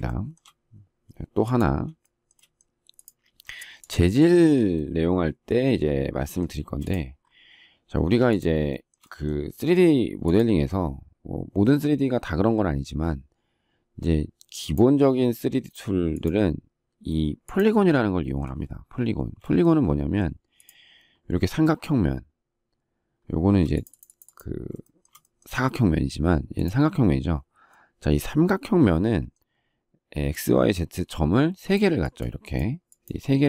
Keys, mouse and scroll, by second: 0.0 shift+middle click, 2.0 shift+middle click, 2.3 shift+middle click, 6.6 space, 8.6 shift+middle click, 19.2 space, 25.0 shift+middle click.